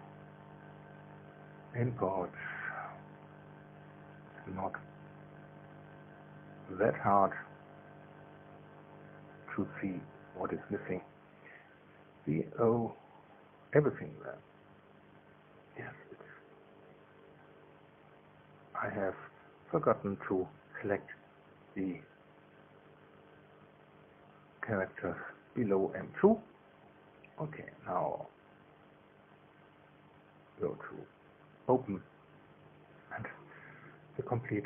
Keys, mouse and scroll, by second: 0.4 click, 1.8 click, 8.7-10.4 drag, 11.4 click, 14.0 ctrl+click, 23.4 ctrl+click, 24.2 ctrl+click, 24.9 ctrl+click, 26.2 ctrl+click, 26.8 ctrl+click, 30.4 click, 31.6 click.